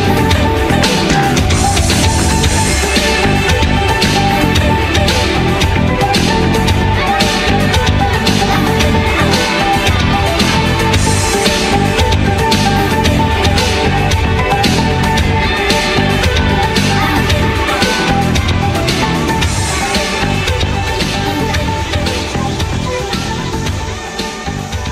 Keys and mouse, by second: 0.0-0.2 typing, 1.4 Tab, 1.7 Tab, 1.9 ctrl+z, 2.6 middle click, 2.7 ctrl+z, 3.1 middle click, 3.2 ctrl+z, 3.6 Tab, 3.9 a, 4.8 middle click, 5.4 k, 5.8-8.1 middle drag, 8.1 z, 8.5 middle click, 9.0 a, 9.2 k, 11.0 z, 11.2 Tab, 11.6 z, 12.0-13.5 middle drag, 13.5 q, 14.1 r, 15.1-16.6 middle drag, 16.6 q, 17.4 middle click, 18.2 click, 18.2-20.9 typing, 20.8-23.6 drag, 22.2 q, 23.7 middle click, 24.2 z, 24.5 Tab.